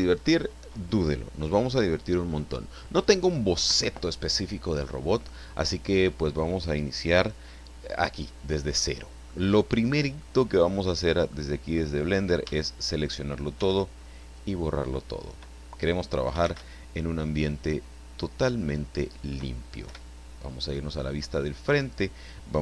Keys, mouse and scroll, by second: 8.8-9.4 middle drag, 9.8-10.1 scroll up 2, 10.2-10.9 middle drag, 11.3-11.9 middle drag, 12.4 a, 13.6 x, 14.2 click, 16.4 shift+c, 17.4-19.4 middle drag, 19.8 KP_1, 20.8-21.2 scroll up 1, 21.3 scroll down 1.